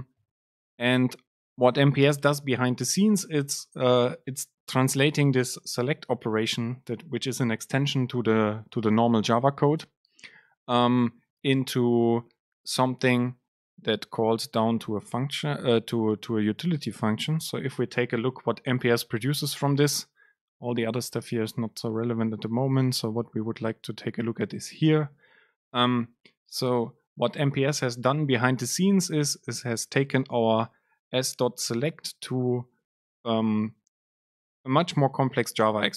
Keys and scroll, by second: 17.5 ctrl+alt+shift+super+F9.